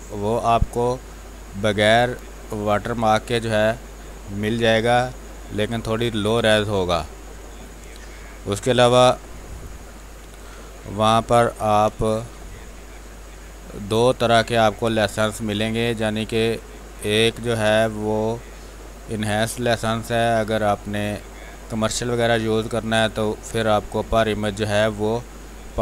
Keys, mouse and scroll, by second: 7.5 space, 7.8 click, 8.0 space, 8.8 r, 9.0-10.4 drag, 10.4 r, 10.6 click, 11.5 b, 11.8 space, 12.0 click, 12.3 space, 13.5-16.8 drag, 16.8 space, 18.0 alt+click, 20.9-22.4 drag, 22.4-24.0 drag, 24.0 space.